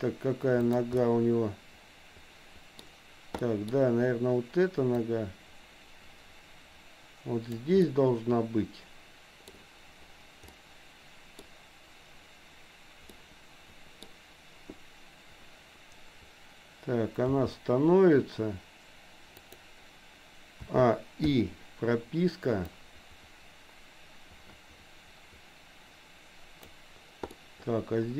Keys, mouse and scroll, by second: 0.7 click, 1.0-2.8 middle drag, 3.5 middle click, 5.1-7.8 drag, 7.8-9.5 middle drag, 10.6 middle click, 13.2 middle click, 17.3 g, 20.7 a, 21.3 i, 22.7-26.8 drag, 27.3-28.1 middle drag.